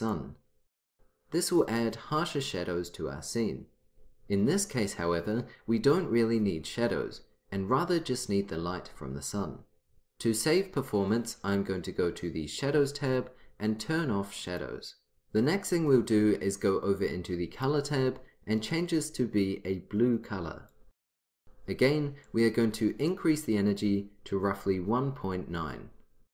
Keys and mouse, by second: 0.1-1.6 drag, 14.7 click, 17.7-19.6 drag, 22.4-24.3 drag.